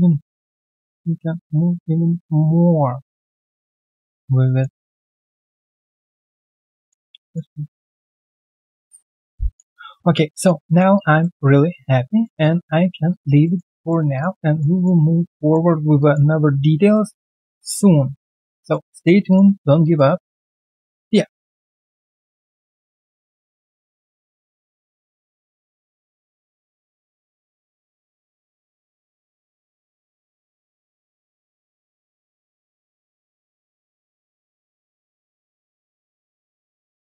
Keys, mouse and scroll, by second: 0.3-3.3 ctrl+z, 3.3-3.6 scroll down 2, 3.6 alt+middle click, 4.7 alt+middle click, 4.7 alt+right click, 5.4 middle click, 7.0 middle click, 7.1 alt+click, 7.6 right click, 8.0 scroll down 1, 8.6 alt+middle click, 8.8 alt+right click, 9.0 alt+click, 9.7-10.3 alt+scroll down 1, 10.3 alt+click, 10.6 alt+middle click, 10.9 alt+click, 12.1 alt+right click, 12.4 alt+click, 13.4 alt+middle click, 13.7 alt+click, 14.4 alt+right click, 14.7 alt+click, 14.9 alt+right click, 15.3 alt+middle click, 15.9 alt+click, 16.3 alt+right click, 16.7 alt+middle click, 17.1 alt+click, 17.9 alt+middle click, 18.1 alt+scroll down 1, 18.5 alt+click, 18.8 alt+right click, 19.8 alt+click.